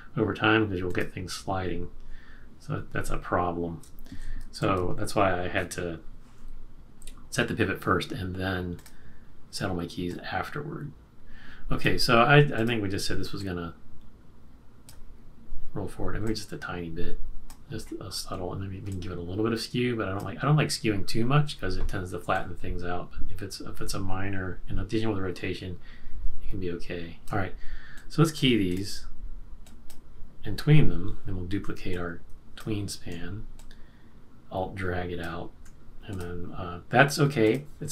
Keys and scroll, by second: 4.4 shift+F6.